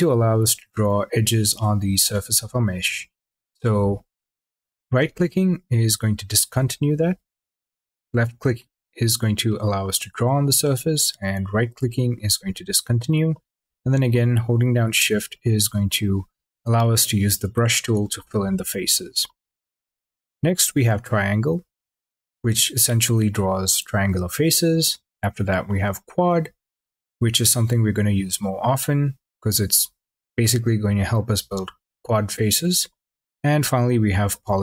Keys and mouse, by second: 0.2 click, 0.8 click, 1.5 click, 4.4 click, 7.0 click, 7.8 click, 8.5 click, 9.3 click, 9.6-11.4 middle drag, 11.4 click, 14.1 shift+click, 14.6 shift+click, 15.2 shift+click, 16.9 shift+click, 17.4 shift+click, 20.6 click, 21.5 click, 21.9 click, 22.6 click, 24.9 click, 26.2 click, 26.9 click, 28.0 click, 28.9 click, 33.3 click.